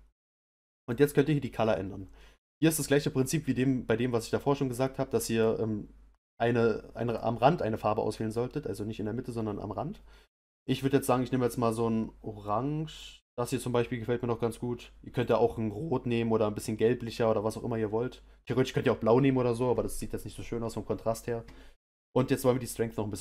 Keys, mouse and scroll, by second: 1.4 click, 17.8 click.